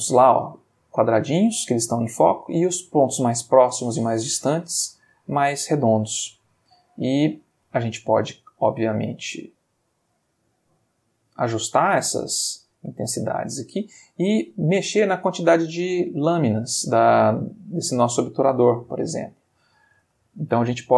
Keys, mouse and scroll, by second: 3.7 space, 7.5 space, 9.3 click, 10.2 space, 12.9 space, 15.1 click, 15.9 click, 17.2 click, 18.8 click, 20.0 space.